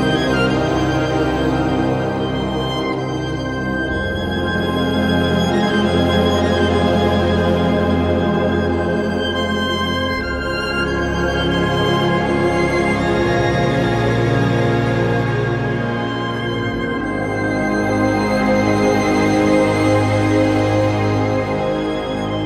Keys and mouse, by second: 0.1 click, 1.4 j, 3.4 j, 4.4 shift+click, 5.4 j, 6.6 shift+click, 7.5 j, 8.2 click, 8.6 shift+click, 9.4 j, 10.5 click, 11.8 j, 12.7 shift+click, 13.7 j, 14.5 click, 15.0 shift+click, 15.9 j, 17.7 j, 18.7 shift+click, 19.5 j, 19.9 click, 20.4 shift+click, 21.3 j, 21.7 click.